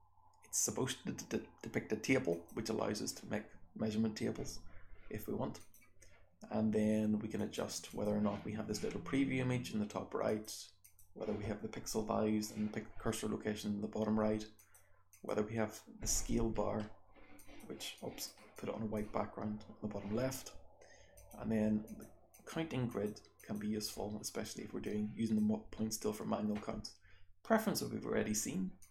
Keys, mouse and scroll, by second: 1.5-2.5 scroll down 1, 7.3 click, 7.8 click, 10.2 click, 10.8 click, 14.5 click, 15.1 click, 16.5-21.1 scroll up 3, 17.3 click, 17.9 click, 18.5 click, 21.1 click, 21.1-21.8 scroll up 1, 21.8 click, 21.8-24.2 scroll up 1, 22.3 click, 22.9 click, 23.3 click, 24.2-24.8 scroll down 1, 24.8-25.3 drag, 24.8-26.3 scroll down 1, 26.3-28.4 scroll down 1, 28.4-28.9 scroll down 1, 28.8 click.